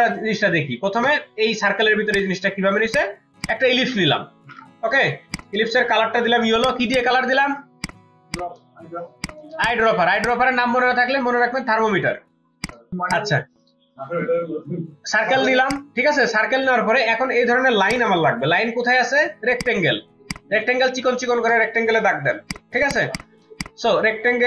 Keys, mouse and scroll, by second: 3.5 double click, 4.8 typing, 6.2 typing, 6.9 double click, 7.4 ctrl+z, 8.3 double click, 9.5 space, 9.6 double click, 17.9 right click, 19.9 right click, 22.0-23.5 typing, 22.7 ctrl+space, 22.9 ctrl+click.